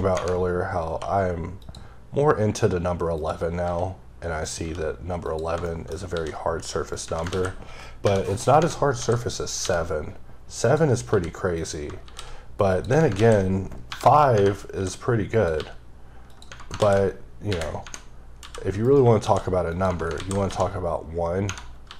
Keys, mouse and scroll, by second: 1.6 click, 3.1 click, 3.6 s, 4.4 click, 4.6 g, 5.2 click, 5.7 shift+middle click, 6.1 shift+d, 6.9 click, 7.0 Tab, 9.5 click, 9.6 g, 10.6 click, 11.1 g, 11.6 click, 12.0 shift+d, 12.7 click, 12.9 Tab, 15.3 click, 15.6 g, 16.3 click, 16.5 Tab, 18.8 right click, 19.2 shift+d, 19.7 click, 19.9 Right.